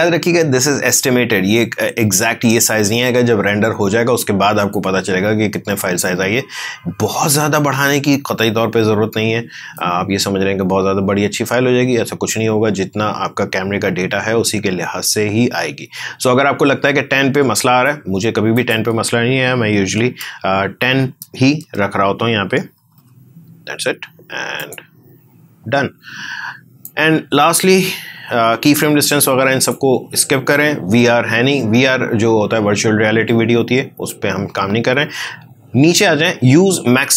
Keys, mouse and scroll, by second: 4.7 click, 4.7-9.7 drag, 9.7-18.5 drag, 21.1 BackSpace, 22.7 typing, 24.5-32.2 drag.